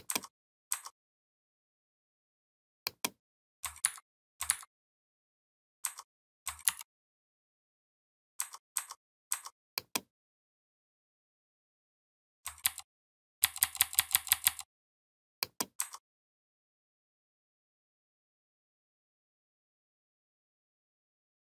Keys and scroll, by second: 3.7 ctrl+c, 4.3 ctrl+c, 6.4 ctrl+b, 12.5 ctrl+[, 13.0 ctrl+[.